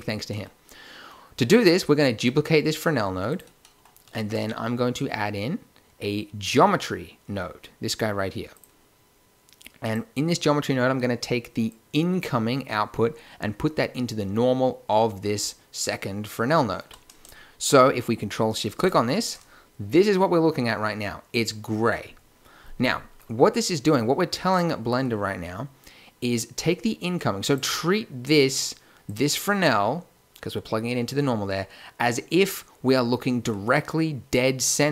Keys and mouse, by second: 4.1 shift+a, 11.6-13.5 drag, 18.8-20.3 drag, 24.5-26.2 drag, 26.2-27.5 middle drag, 27.5-28.2 drag, 29.0-30.8 drag, 33.7-34.9 middle drag.